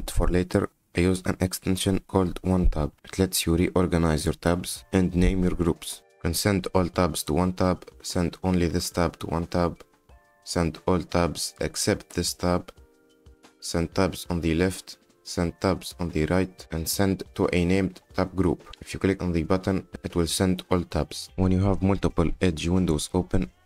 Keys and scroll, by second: 21.2 e.